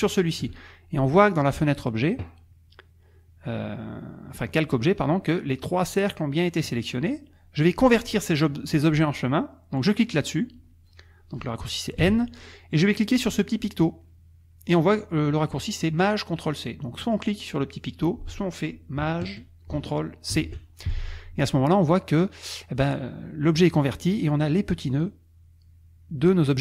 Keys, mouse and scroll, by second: 12.0 n, 20.3 ctrl+shift+c, 25.0 click.